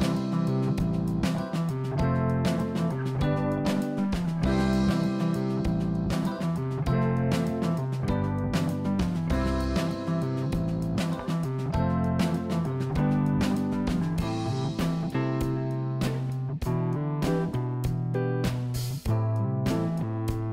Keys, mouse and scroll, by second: 3.7 s, 7.5 ctrl+z, 8.4 s, 10.9 ctrl+z, 12.0 s, 15.5-17.2 scroll down 2, 19.5-20.5 drag.